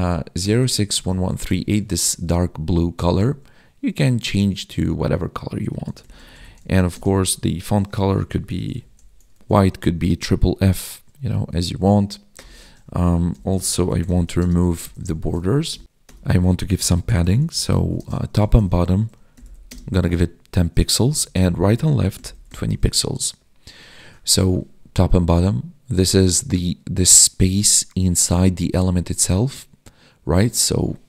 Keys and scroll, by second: 2.0 ctrl+s, 2.3 Right, 7.0 space, 9.4 ctrl+s, 14.4 space, 15.4 ctrl+s, 18.0 space, 19.7 space, 22.8 ctrl+s.